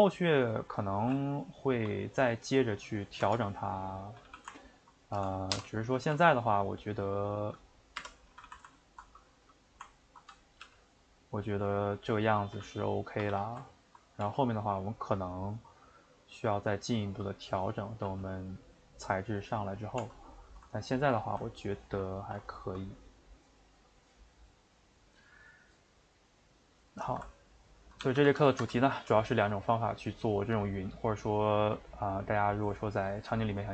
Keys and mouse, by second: 0.5 Left, 1.0 g, 3.4 Tab, 3.7 middle click, 4.1 a, 4.2 a, 4.7 ctrl+Right, 5.5 o, 8.3 a, 8.4 a, 8.9 ctrl+Right, 10.0 ctrl+Right, 10.6 g, 12.5 a, 13.1 a, 13.3 a, 13.8 ctrl+Right, 14.2 g, 17.6 click, 18.1 g, 20.1 Tab, 20.3-28.0 middle drag, 28.0 a, 28.2 a, 28.5-33.7 ctrl+shift+middle drag.